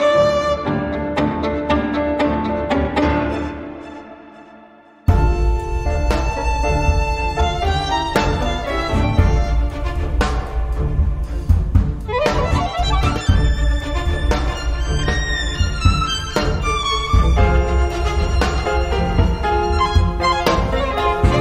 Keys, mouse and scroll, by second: 0.1 click, 1.0 click, 2.2 click, 2.9-4.5 typing, 5.2-7.2 drag, 7.4 click, 8.0 click, 8.9 scroll down 1, 9.2 click, 9.6-9.9 scroll up 1, 10.7 click, 11.2 space, 11.7 click, 12.6 1, 13.0 2, 14.9 click, 17.2 click, 18.9 BackSpace, 20.1-21.4 drag.